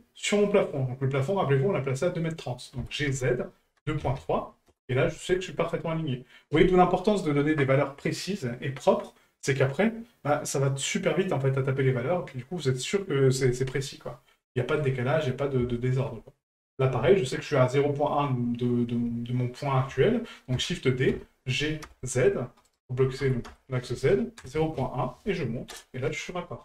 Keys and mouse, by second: 14.5 middle click, 15.7 shift+middle drag.